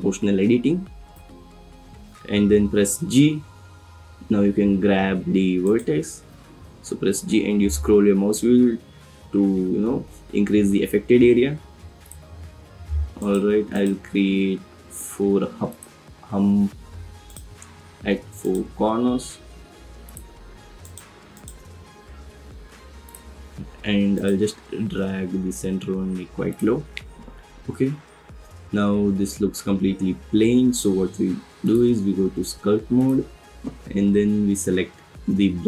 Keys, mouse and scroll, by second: 1.1 o, 2.9 g, 6.3 g, 12.0 click, 13.2 click, 13.7 click, 14.1 g, 14.2 z, 15.7 click, 18.4 click, 18.8 g, 19.0 z, 20.0 click, 20.8 click, 21.3 click, 21.7 g, 23.0 click, 24.1 click, 24.9 z, 26.5 click, 26.9 Tab, 31.6-33.3 drag.